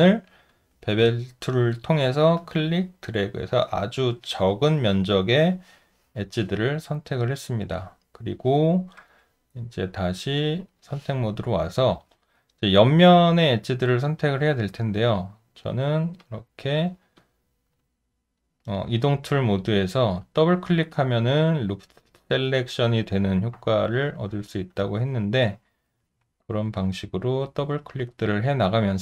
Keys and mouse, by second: 11.7 alt+right click, 12.4 alt+click, 14.8 alt+click, 15.6 alt+right click, 16.2 alt+click, 17.2 alt+click, 17.9 alt+middle click, 18.7 alt+right click, 20.0 shift+click, 20.2 shift+click, 23.6 shift+click, 23.8 shift+click, 24.7 alt+click, 27.2 shift+click, 27.4 shift+click, 27.4 shift+double click, 28.4 alt+right click.